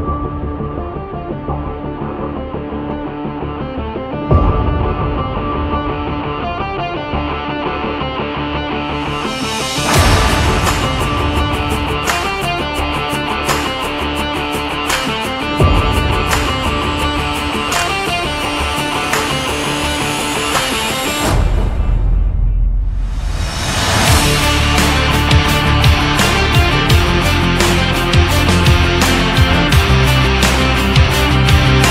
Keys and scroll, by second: 14.7 ctrl+z, 16.0 ctrl+z, 20.3 Up, 21.5 Down, 22.0 Up.